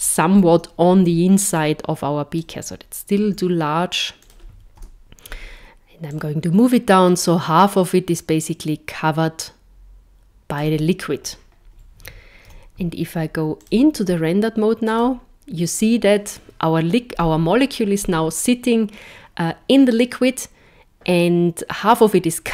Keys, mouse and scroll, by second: 0.3 KP_7, 1.6 click, 3.2 s, 4.9 KP_0, 6.1 click, 12.4 z, 14.9 click.